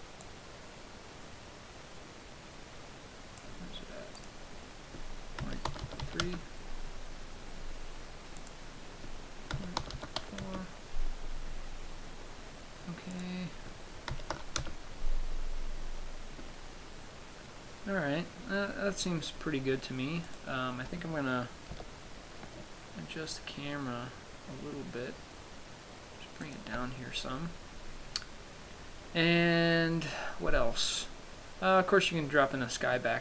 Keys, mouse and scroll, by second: 0.7 click, 4.7 click, 8.8 click, 13.6 click, 20.6 right click, 22.1 g, 26.9 shift+click.